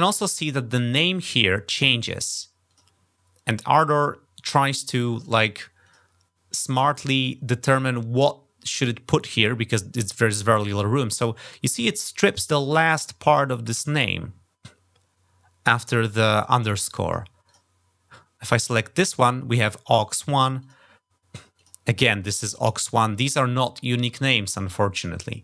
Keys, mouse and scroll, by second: 2.0 click, 2.5 click, 5.0 click, 5.6 click, 16.8 click, 17.3 click, 20.4 click, 21.3 click, 25.0 click.